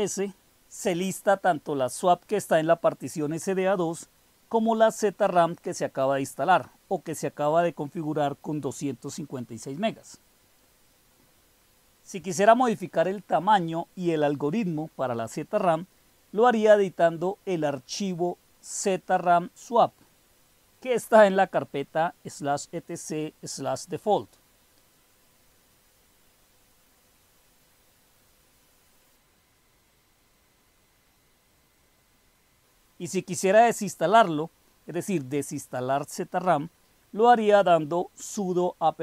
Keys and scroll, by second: 0.7 Return, 14.6-15.5 typing, 17.9 typing, 19.9-25.5 typing, 26.9 Return, 30.0-30.8 typing, 30.8 Up, 30.9 Up, 31.0 Up, 31.6 Up, 31.7 Up, 31.9 Up, 32.4 Up, 35.0-35.7 Left, 37.4-39.0 typing.